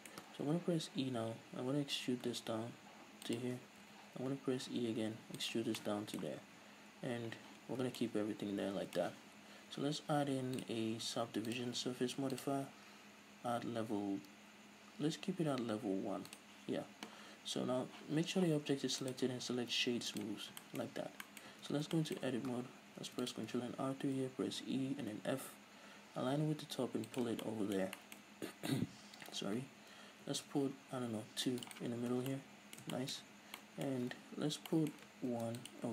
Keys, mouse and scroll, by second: 1.2 e, 3.6 shift+click, 3.9 e, 5.8 shift+click, 5.9-10.6 middle drag, 6.6 x, 7.7-8.0 scroll down 2, 10.6 click, 10.8-11.6 middle drag, 11.6-16.5 drag, 19.1-20.7 drag, 20.7-27.3 shift+middle drag, 21.0-22.0 scroll up 4, 21.5 Tab, 23.1 ctrl+r, 27.3 shift+click, 27.5-33.4 middle drag, 28.3-29.8 scroll up 2, 29.8-30.3 scroll down 2, 30.3 ctrl+r, 31.8 click, 32.0 scroll down 2, 32.2 Tab, 33.3 Tab, 33.4 scroll up 2, 33.6-35.9 middle drag, 35.3 ctrl+r.